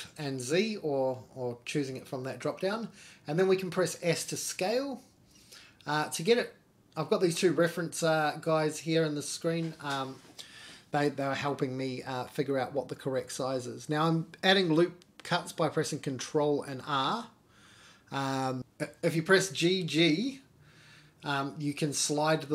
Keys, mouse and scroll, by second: 6.7-7.6 scroll down 1, 7.6-8.0 middle drag, 8.2-8.7 scroll down 2, 8.7 Tab, 9.2 scroll down 1, 9.4 middle click, 10.4 ctrl+r, 14.5-15.0 scroll down 2, 14.7 middle click, 15.0 ctrl+z, 15.6 middle click, 17.0 ctrl+r, 20.7-21.3 scroll up 3, 21.0 middle click, 21.6 middle click, 22.0 scroll down 1, 22.2 middle click.